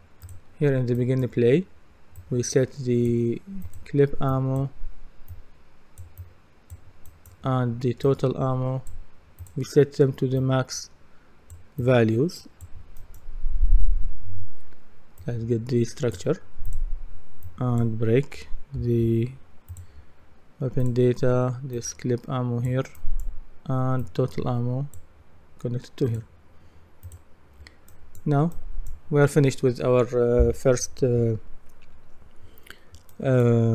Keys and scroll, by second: 18.1-19.5 typing.